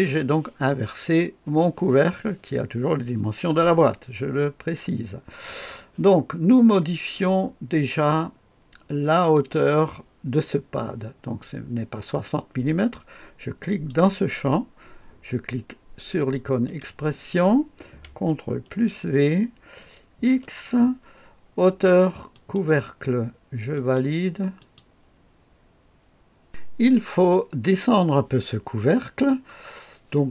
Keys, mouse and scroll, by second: 0.7-3.0 scroll down 1, 9.3 click, 13.6 click, 16.6 click, 18.4 ctrl+v, 20.2 x, 22.3 click, 22.6 click, 24.5 click, 26.4 click.